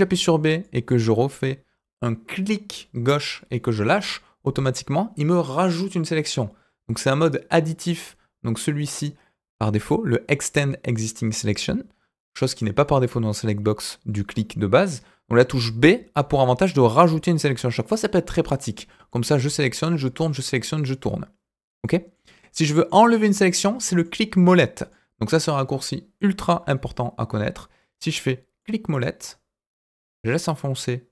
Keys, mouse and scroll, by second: 15.7 b, 16.9 middle click, 17.4 b, 18.6 middle click, 19.3 b, 19.9 middle click, 20.3 b, 22.1 middle click, 23.1 middle click, 24.5 middle click, 26.4 b.